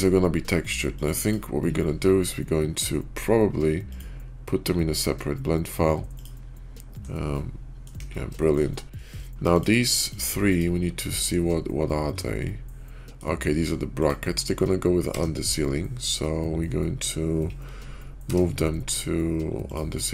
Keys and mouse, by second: 1.2 typing, 6.0 click, 7.1-7.8 middle drag, 7.9 KP_5, 8.3 shift+middle drag, 8.6 middle drag, 9.5 click, 10.0 shift+click, 10.4-10.9 shift+drag, 11.3 /, 12.1-13.1 drag, 13.9-15.0 drag, 15.0 m, 17.8 /.